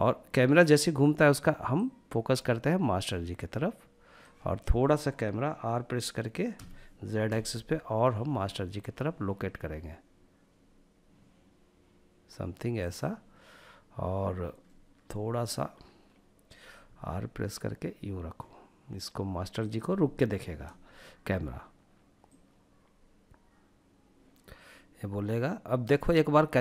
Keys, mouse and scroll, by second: 1.0-3.6 drag, 5.8 r, 6.6 z, 12.1 click, 13.9-15.1 middle drag, 16.1 r, 18.9 click, 21.6-25.2 drag, 26.3 click.